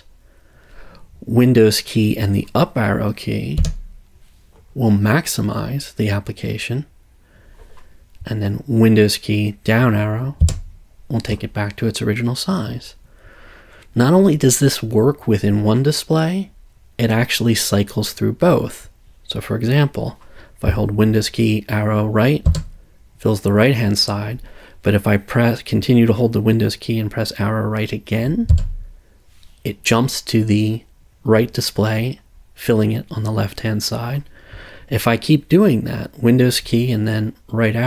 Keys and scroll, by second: 3.6 super+Up, 10.4 super+Down, 22.5 super+Right, 28.5 super+Right.